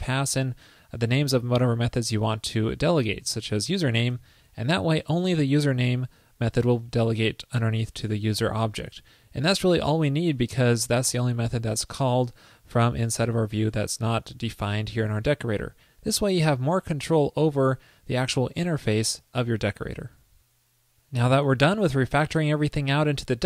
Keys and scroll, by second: 20.1 super+s.